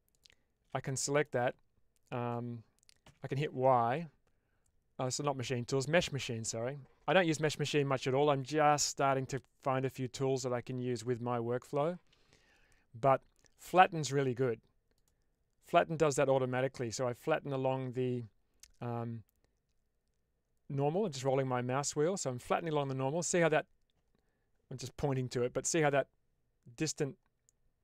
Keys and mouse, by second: 0.8 middle click, 3.3 y.